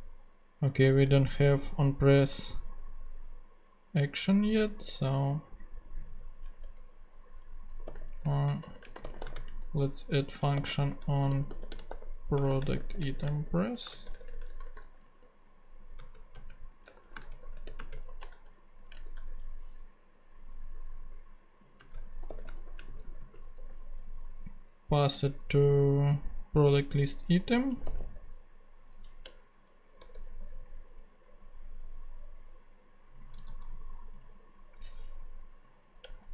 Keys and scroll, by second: 1.2 ctrl+Tab, 6.7 Return, 7.5-18.5 typing, 18.9 shift+super+Return, 19.0 shift+super+z, 20.0 Return, 21.8-23.6 typing, 27.6-28.4 typing, 29.2 Return, 30.0 BackSpace, 33.4 super+c, 36.0 Return.